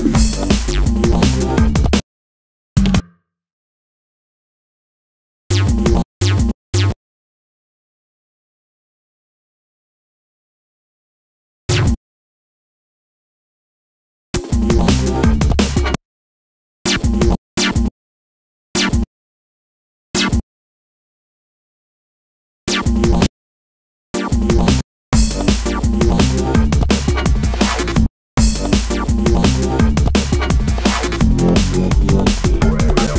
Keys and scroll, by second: 0.3 space, 2.8 super+a, 10.3 space, 12.4 shift+super+Up, 13.6 space, 21.0 space, 26.3 space, 28.9 space.